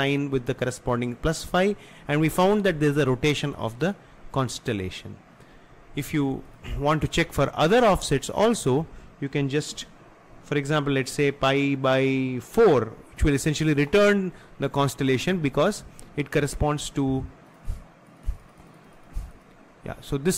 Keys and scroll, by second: 9.8 BackSpace, 12.7 4.